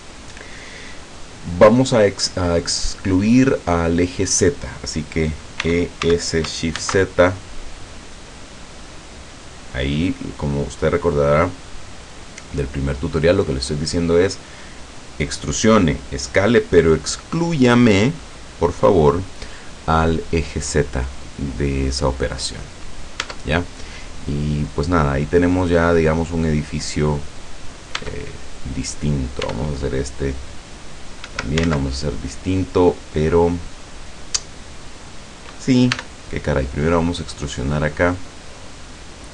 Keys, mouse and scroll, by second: 5.7 e, 6.1 s, 6.9 shift+z, 10.1 click, 11.0 scroll down 1, 11.5-12.7 middle drag, 12.9 middle click, 21.7 scroll down 1, 22.5 scroll up 1, 23.3 Tab, 24.3 middle click, 24.9 middle click, 26.1 middle click, 26.7-27.9 middle drag, 28.0 Tab, 28.5 middle click, 28.7 right click, 29.5 e, 31.3 Escape, 31.8 ctrl+z, 35.9 e, 38.3 click.